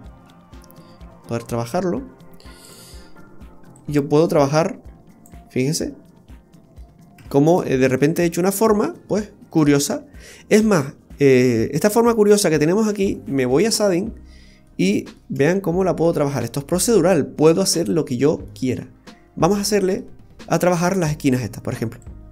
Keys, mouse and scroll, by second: 0.2 middle click, 2.6 click, 5.5-6.5 scroll down 2, 5.8 middle click, 7.1 Tab, 7.6 middle click, 8.4 middle click, 9.2 shift+middle click, 9.5 shift+middle click, 10.2 middle click, 10.2 scroll up 1, 13.7 click, 14.0-14.7 scroll up 5, 14.7 middle click, 15.5 shift+middle click, 17.0-17.6 scroll down 2, 17.4-18.5 scroll up 9, 18.5 middle click, 19.0-19.4 scroll up 3, 19.7 middle click, 20.3 scroll up 1, 20.5 middle click, 22.0 click.